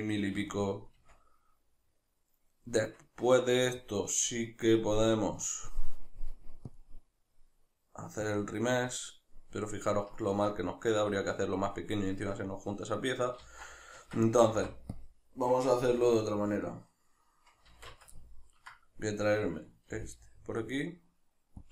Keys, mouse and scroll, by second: 1.0 Tab, 2.6 Tab, 6.7-9.3 drag, 9.3-19.1 middle drag, 13.4 ctrl+z, 14.0 Tab, 15.8 KP_Divide, 17.7 alt+q, 19.1 right click, 19.9 g.